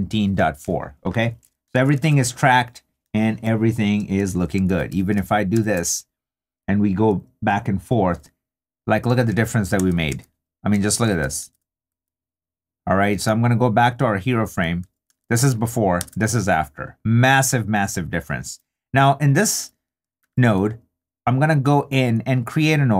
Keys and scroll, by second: 1.8 super+d, 4.7 super+w, 9.3 super+d, 15.1 super+d, 19.5 i.